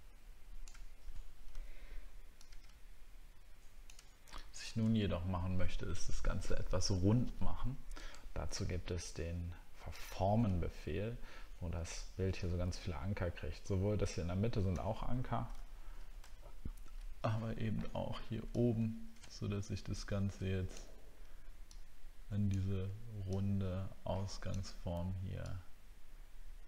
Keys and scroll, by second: 1.5 ctrl+z, 4.3 alt+scroll down 1, 16.4 alt+scroll up 1.